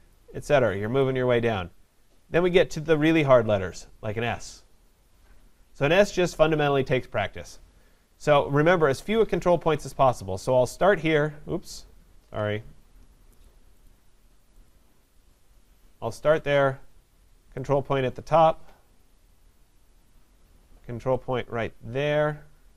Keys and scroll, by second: 12.2 ctrl+z.